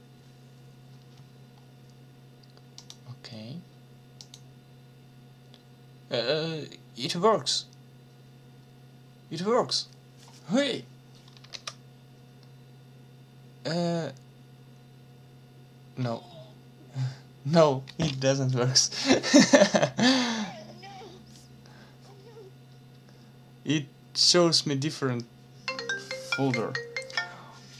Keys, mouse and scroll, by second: 2.8 click, 4.2 click, 11.5 ctrl+s.